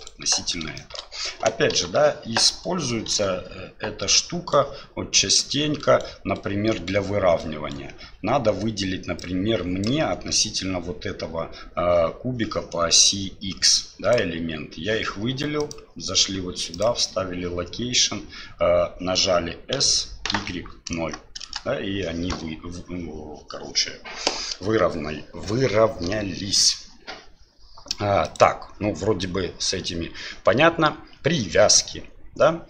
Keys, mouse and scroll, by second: 0.8 shift+middle click, 1.7 Delete, 3.1 KP_7, 4.1 right click, 5.1 right click, 5.8 right click, 6.3 right click, 7.4 right click, 9.3 click, 13.7-14.1 drag, 15.6-17.0 drag, 19.7 s, 28.2-29.8 drag.